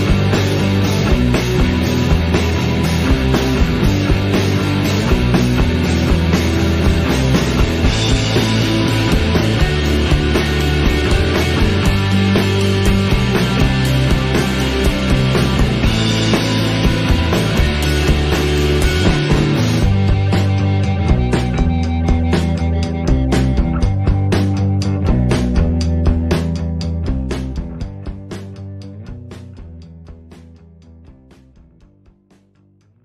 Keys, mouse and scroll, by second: 1.0-3.6 drag, 4.4-5.2 drag, 7.0 click, 9.5-10.2 scroll down 1, 10.2 shift+middle click, 10.7 click, 11.4-14.7 drag, 14.9 click, 18.8 alt+a, 21.9 click, 22.3-23.9 scroll down 6, 23.9-25.1 drag, 25.8-26.5 scroll up 19, 26.5 click, 27.4-28.9 drag, 29.6-30.9 drag.